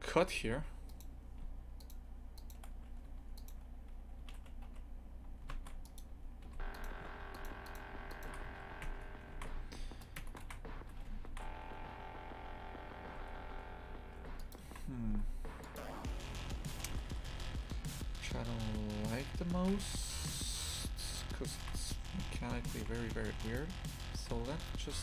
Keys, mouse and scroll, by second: 0.4 2, 0.9 right click, 2.4 shift+right click, 3.1 1, 3.4 right click, 4.2 e, 6.4 2, 6.7 right click, 7.3 shift+right click, 7.7 shift+right click, 8.1 shift+right click, 8.4 f, 8.8 Tab, 9.3 shift+f, 10.2 Tab, 10.4 shift+f, 14.7 shift+f, 16.7 ctrl+z, 16.9-18.1 ctrl+z, 19.6 shift+f, 21.6 shift+f, 24.5 a.